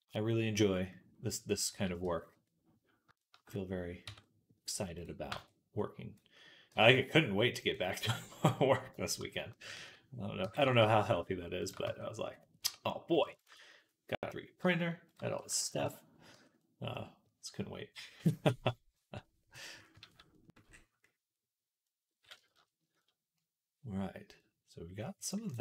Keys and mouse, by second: 1.9 Tab, 3.9 Tab, 4.8-7.6 drag, 4.8-9.3 right drag, 6.5 g, 9.3-13.0 ctrl+drag, 9.6 ctrl+z, 10.3 g, 11.7 Tab, 12.5 Tab, 14.9 shift+click, 15.2 s, 16.2 Tab, 16.4-21.0 drag, 19.9 ctrl+s, 21.0-24.5 right drag, 24.6-25.6 right drag.